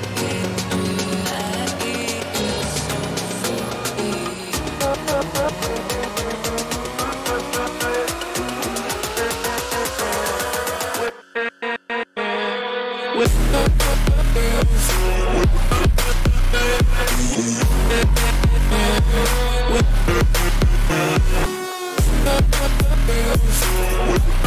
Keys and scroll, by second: 0.1 ctrl+-, 4.0 ctrl+-, 8.8 ctrl+shift+n, 9.0 ctrl+shift+Return, 9.8 b, 17.9 ], 18.1 ], 18.5 [, 19.0 [.